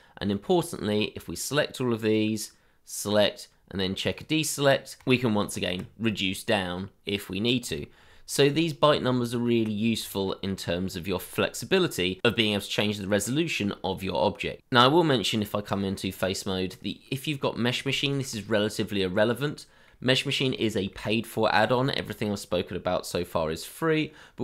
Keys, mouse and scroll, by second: 5.5 ctrl+x, 6.1 middle click, 7.8 shift+middle click, 8.2 scroll down 1, 8.8 middle click, 9.1 Tab, 9.8 scroll down 1, 10.6 middle click, 12.2 shift+middle click, 13.9-14.6 scroll up 1, 14.6 Tab, 16.7 ctrl+click, 18.5 shift+middle click, 18.8-19.1 scroll up 1, 19.4 middle click, 20.6 shift+middle click.